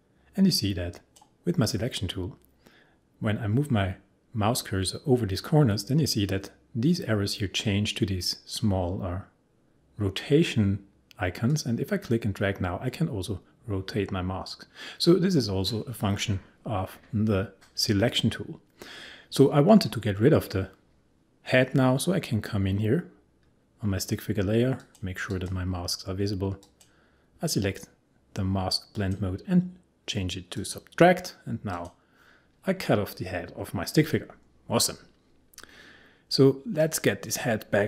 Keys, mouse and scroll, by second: 11.5-19.2 drag.